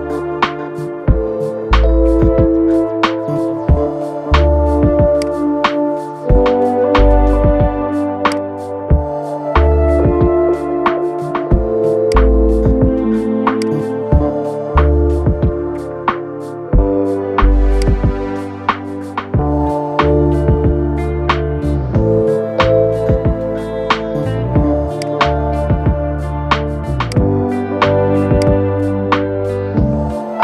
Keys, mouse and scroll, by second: 2.3 scroll down 2, 3.0 Tab, 4.2 scroll up 2, 4.9 click, 7.8 Tab, 8.0 click, 10.6-11.1 scroll down 2, 11.1-11.8 scroll up 2, 11.8 click, 15.1 scroll down 1, 15.7 Tab, 17.0 scroll down 4, 17.5 click, 18.0 scroll up 3, 19.6-22.2 middle drag, 22.2-22.6 scroll up 1, 22.7-24.2 middle drag, 24.2 Tab, 24.7 click, 26.8 click, 28.1 click.